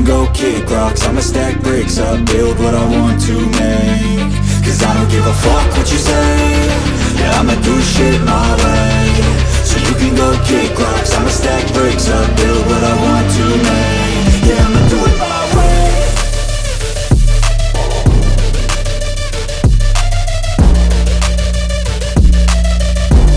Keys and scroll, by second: 3.1 ctrl+space, 3.9 ctrl+space, 10.8 BackSpace, 11.2 2, 11.9 space, 14.0 ctrl+a, 14.1 ctrl+BackSpace, 14.4 ctrl+2, 14.7 ctrl+space, 14.8-15.3 typing, 15.5 Return.